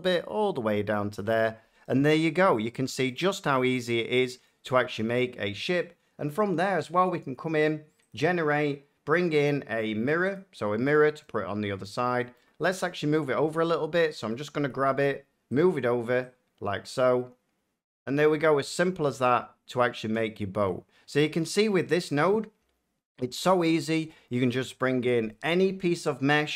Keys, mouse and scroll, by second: 1.1-3.0 shift+drag, 3.0 middle click, 3.1 scroll, 5.5-6.6 scroll, 6.6 click, 8.0 click, 10.3 click, 11.8 middle click, 12.3 shift+middle click, 12.6 Tab, 13.8 a, 15.5 click, 17.6 click, 17.9 click, 18.8 middle click, 18.9 Tab, 20.6 middle click, 21.3 shift+middle click, 21.8 middle click, 22.3 shift+middle click, 22.6-23.3 shift+scroll, 23.5 shift+middle click.